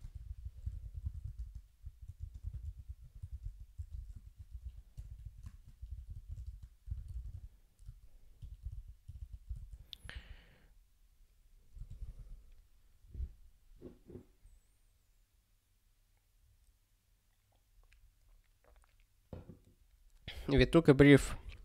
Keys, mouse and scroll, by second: 0.0-7.3 typing, 8.7 ctrl+g, 10.1 super+b, 11.9 ctrl+g, 12.1 super+b.